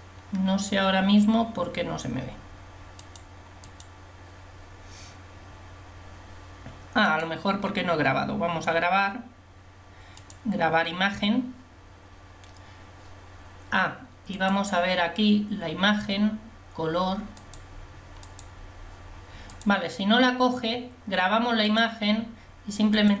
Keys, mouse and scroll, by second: 18.3-21.8 drag, 22.1-23.2 drag.